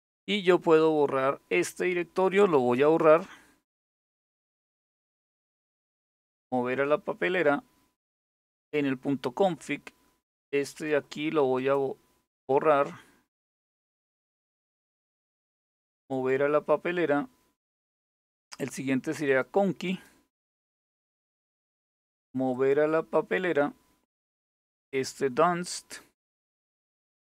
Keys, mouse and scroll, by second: 1.3 click, 2.6-7.0 right drag, 7.0 click, 10.3 click, 11.2-15.7 right drag, 15.7 click, 18.9 click, 20.0-22.2 right drag, 22.2 click, 24.6 click, 25.6-27.3 right drag.